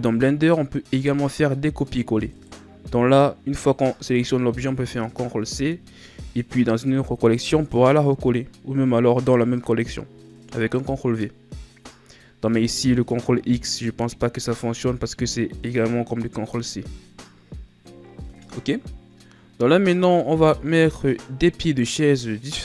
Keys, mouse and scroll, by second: 2.2 right click, 3.5 click, 4.5 right click, 20.9-22.6 middle drag.